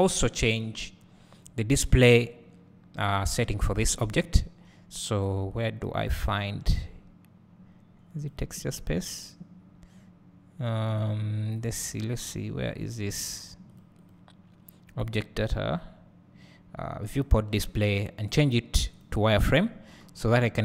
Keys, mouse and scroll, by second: 19.2-20.4 drag.